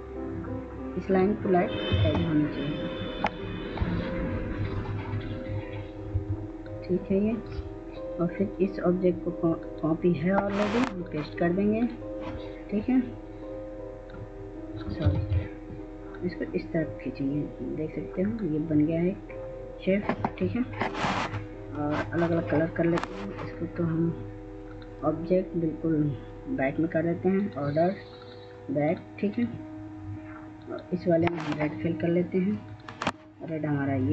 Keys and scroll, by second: 2.2 ctrl+space, 6.4 F2, 15.4 ctrl+z.